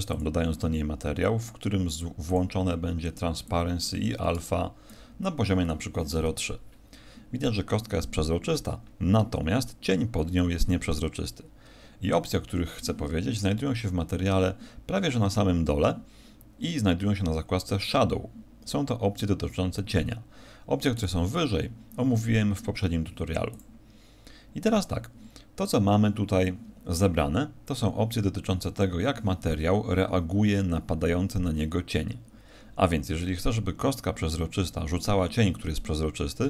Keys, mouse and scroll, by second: 0.1 click, 1.1-1.8 scroll down 4, 1.9 click, 2.3 click, 3.4 click.